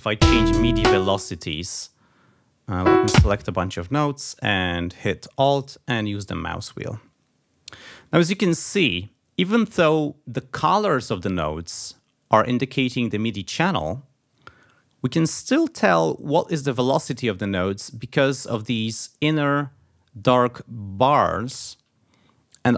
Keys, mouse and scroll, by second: 0.1 a, 0.8 space, 1.0-1.7 scroll up 2, 2.7-3.6 scroll up 1, 5.4-6.1 alt+scroll down 4, 6.5-6.9 alt+scroll down 4, 8.2-8.6 alt+scroll down 2, 8.9 alt+scroll up 2.